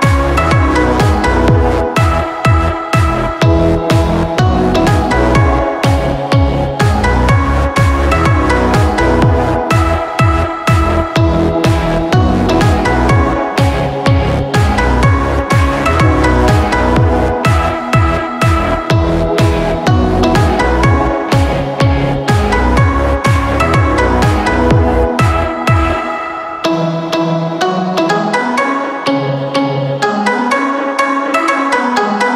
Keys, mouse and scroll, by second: 12.0 ctrl+i.